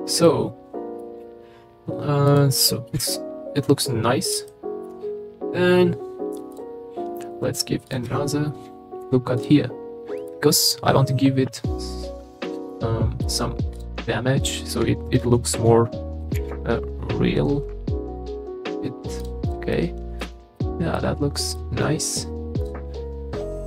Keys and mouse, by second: 0.2-1.0 middle drag, 2.3 middle click, 3.0 KP_3, 4.5 shift+middle drag, 6.5 click, 7.8 click, 8.1 Tab, 9.0 ctrl+r, 10.2 click, 12.7 middle click, 16.4 ctrl+shift+b, 19.2 click, 19.7 middle click, 20.2 Tab, 20.6-20.9 middle drag, 21.5-22.2 middle drag.